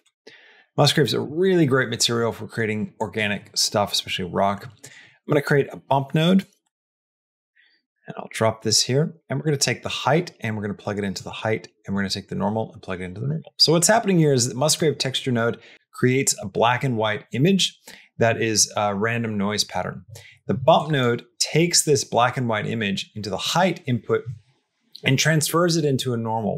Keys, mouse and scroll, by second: 0.5 middle click, 0.9 click, 1.5 middle click, 2.8 click, 4.6 click, 5.0 shift+a, 9.0 click, 9.8-11.0 drag, 11.8-13.1 drag, 13.3 middle click, 14.0 click, 20.6 click.